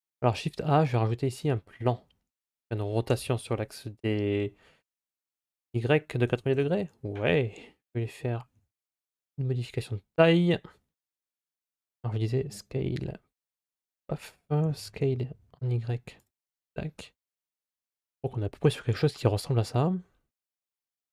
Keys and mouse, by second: 2.9 r, 8.4 s, 12.1 s, 14.4 s.